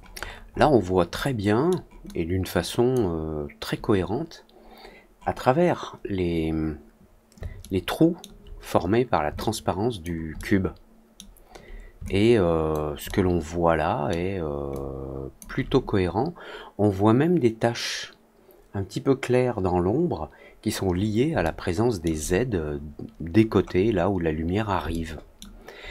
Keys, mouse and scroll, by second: 0.1 alt+middle click, 0.5 alt+middle click, 1.1 alt+middle click, 2.0 alt+click, 6.2 middle click, 7.5-8.1 alt+middle drag, 9.3-9.9 alt+drag, 10.3 alt+middle click, 12.0 alt+click, 13.0-14.0 alt+middle drag, 14.6 alt+click, 21.3 alt+middle click, 23.3 middle click, 23.7 middle click, 24.8 alt+middle click, 25.7 alt+middle click.